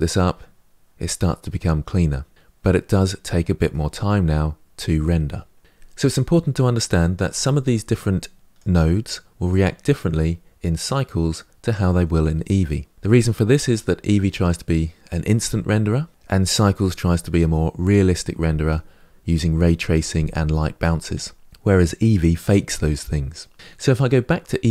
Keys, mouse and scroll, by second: 3.1-5.6 middle drag, 7.8-10.2 drag.